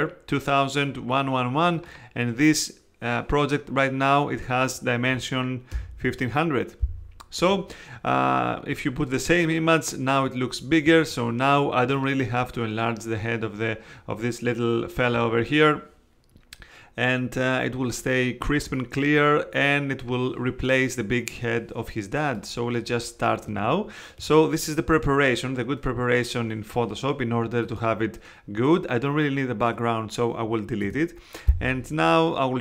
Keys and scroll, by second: 5.7 alt+super+i, 7.4 Escape, 30.8 BackSpace.